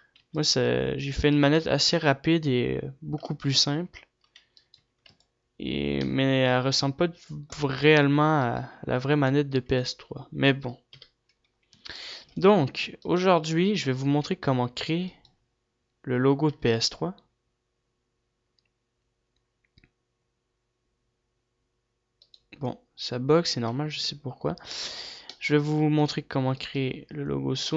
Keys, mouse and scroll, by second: 2.0 ctrl+s, 2.0-4.2 right drag, 4.2 g, 5.1-5.8 right drag, 5.1 a, 5.8 ctrl+s, 5.8-7.1 middle drag, 9.3 ctrl+s, 9.3-11.2 right drag, 11.2 ctrl+s, 11.2 KP_7, 12.0 a, 12.8 ctrl+s, 14.0-17.8 right drag, 17.8 g, 24.0-25.2 right drag, 25.2 a, 25.8-27.3 middle drag, 27.3-27.7 right drag.